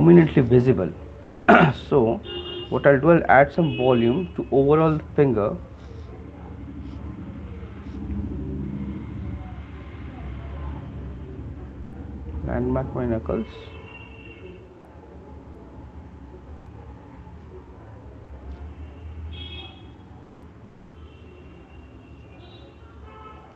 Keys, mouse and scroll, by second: 1.5 click, 2.4 right click, 2.4 alt+click, 3.4 ], 3.6 [, 4.0 [, 4.2 [, 6.6 click, 10.6 click, 12.4 click, 13.9 click, 15.3 click, 15.5 click, 15.7 click, 16.1 click, 17.7 alt+click, 17.7 alt+click, 19.9 click.